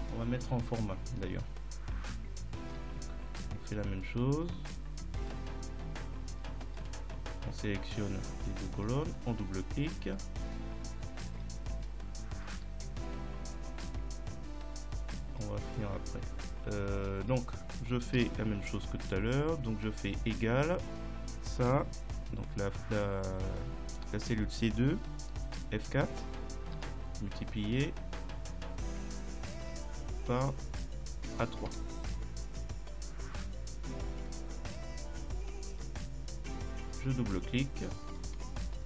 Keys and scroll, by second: 18.2 =, 25.5 F4, 26.8 *, 31.7 Return.